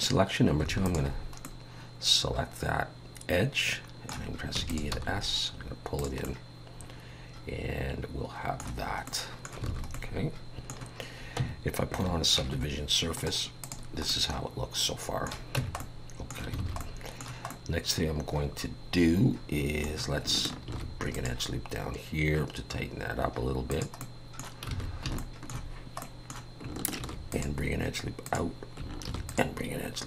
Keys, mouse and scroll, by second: 0.9 alt+shift+click, 1.4 middle click, 4.6 e, 5.0 s, 6.2 middle click, 9.1 middle click, 9.7 alt+a, 9.9 middle click, 11.4 Tab, 12.4 ctrl+2, 13.2 right click, 14.1 middle click, 15.6 Tab, 15.8 middle click, 16.6 alt+a, 16.8 middle click, 17.5 middle click, 20.7 ctrl+r, 24.0 middle click, 24.7 alt+a, 25.2 shift+middle click, 26.0 middle click, 27.0 ctrl+r, 29.0 ctrl+r.